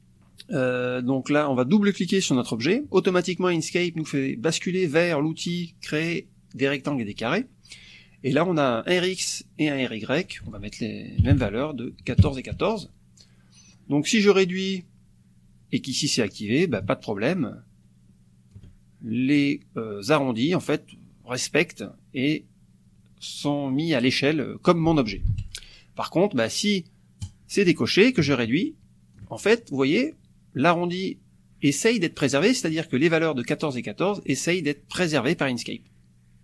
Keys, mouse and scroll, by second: 2.3 click, 10.2 ctrl+click, 10.5 ctrl+a, 11.2 KP_1, 11.5 Tab, 11.9 KP_1, 12.6 Tab, 13.7 click, 16.8-18.7 ctrl+shift+drag, 25.3 ctrl+z, 27.3 click, 28.2-29.3 ctrl+shift+drag, 32.3 click.